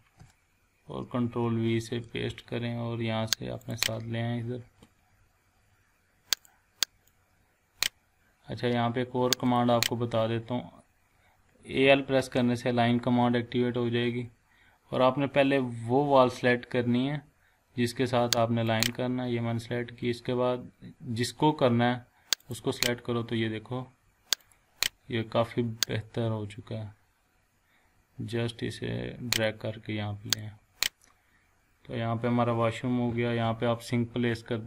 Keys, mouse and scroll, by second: 0.4 scroll down 1, 1.8 ctrl+v, 2.4 scroll up 1, 3.6 click, 6.4-8.0 drag, 8.5 scroll up 1, 9.4 click, 10.1 scroll up 1, 11.7-12.7 typing, 15.1 scroll down 1, 16.3-16.8 scroll up 1, 18.7 click, 19.6 scroll up 1, 22.4 click, 22.9 scroll down 1, 24.4-29.6 drag, 30.6 scroll down 1, 31.0 scroll up 1.